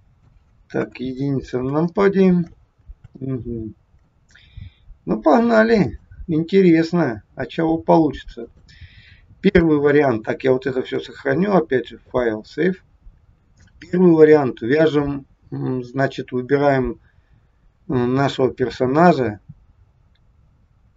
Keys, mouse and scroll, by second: 0.7 KP_1, 1.8 shift+middle click, 5.8 click, 8.4 click, 9.3 scroll up 1, 9.6 shift+middle click, 10.8 click, 13.2 scroll down 1, 17.2-17.9 scroll up 3, 18.5-19.1 scroll down 1.